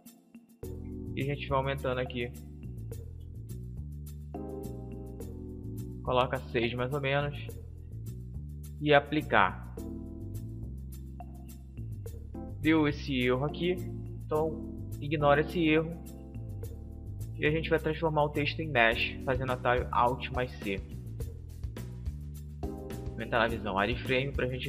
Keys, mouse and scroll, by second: 0.8-3.1 drag, 17.2 alt+c, 22.7 z, 23.8 middle click.